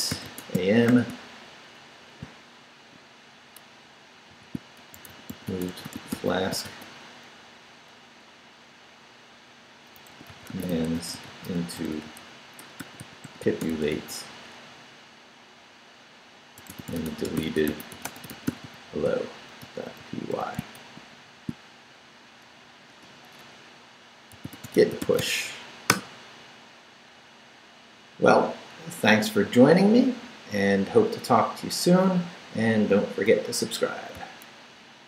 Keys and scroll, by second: 0.0-1.4 typing, 4.1-6.6 typing, 9.7-14.2 typing, 16.5-21.3 typing, 22.9 Return, 24.1-25.7 typing, 25.9 Return.